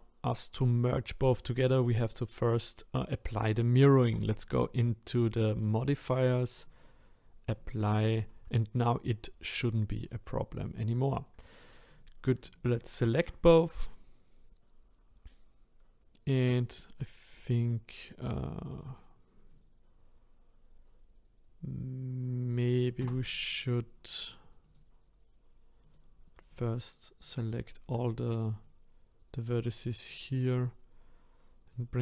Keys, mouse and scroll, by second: 3.9-7.5 scroll down 2, 7.5-12.0 drag, 17.6 click, 18.8 click, 19.7 click, 23.0 Tab, 23.4-24.6 scroll up 2, 24.6 click, 25.9 click, 26.6 alt+click, 27.3 alt+click, 28.8 click, 30.2 click.